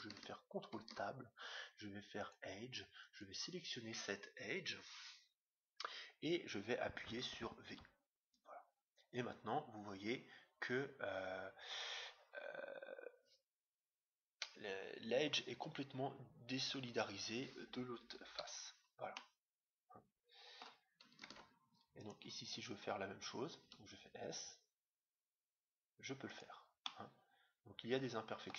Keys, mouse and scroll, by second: 0.7 ctrl+Tab, 3.0-4.7 right drag, 4.8 right click, 7.8 v, 19.1-20.8 middle drag, 21.3 ctrl+Tab, 22.4-24.3 right drag, 23.6 s, 26.8-28.5 middle drag.